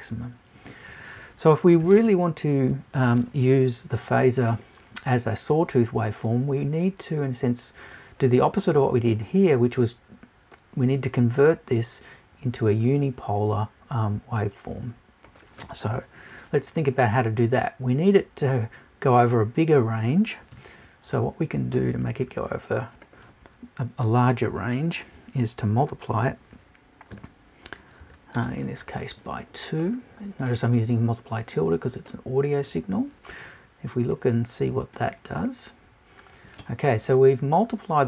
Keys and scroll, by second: 20.5 BackSpace.